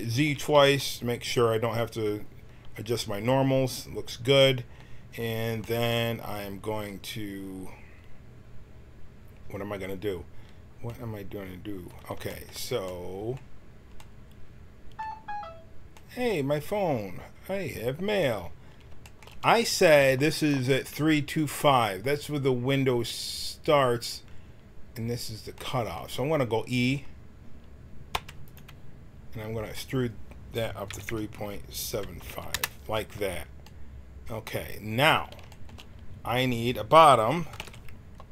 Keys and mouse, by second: 0.2 z, 0.4 z, 5.0 middle click, 5.6-10.4 middle drag, 10.9 middle click, 18.1-21.1 drag, 19.0-21.1 right drag, 25.5 middle click, 25.6 click, 25.7 middle click, 28.1 e, 31.3 click, 33.6-35.6 middle drag, 37.5 ctrl+r.